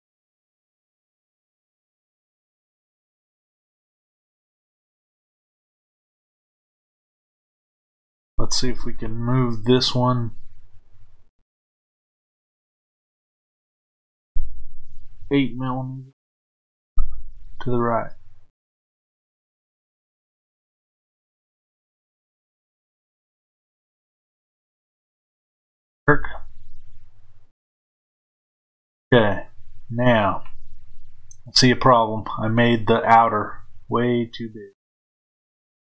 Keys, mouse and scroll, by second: 0.2 click, 4.2 middle click, 4.4 click, 6.4 click, 10.5-13.6 middle drag, 13.6-34.2 drag.